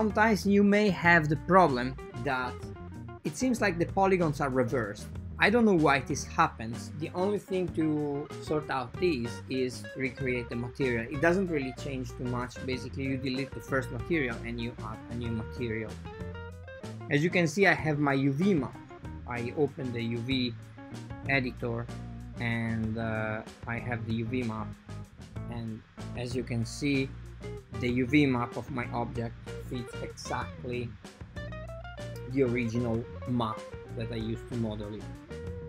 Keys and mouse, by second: 0.0-0.4 typing, 2.0-2.6 typing, 4.2 typing, 4.5 click, 8.1 click, 9.1 click, 9.9-12.2 drag, 11.5 BackSpace, 13.6 click, 14.4 click, 15.1 click, 19.8 ctrl+t, 20.6 click, 21.1 click, 22.7 click, 23.2 click, 24.0 click, 24.5 Tab, 25.4 a, 29.8 click, 31.3 click, 32.7 click, 34.3 click, 34.7 click, 35.4-35.6 drag.